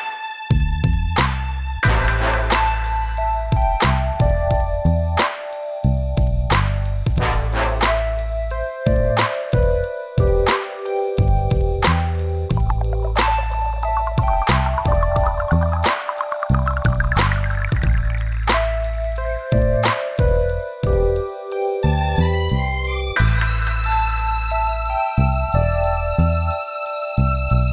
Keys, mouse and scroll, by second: 1.4 click, 1.5 click, 1.6 click, 2.0 middle click, 4.6-5.0 scroll down 2, 6.9-7.2 scroll down 2, 12.6 scroll up 3, 13.2 middle click, 19.0 click, 19.1 click.